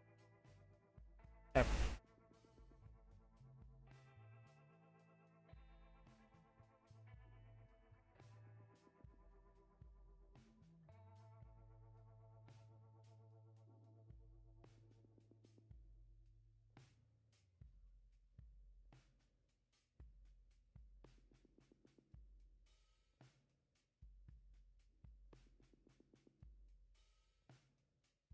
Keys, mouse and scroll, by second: 22.9 right click.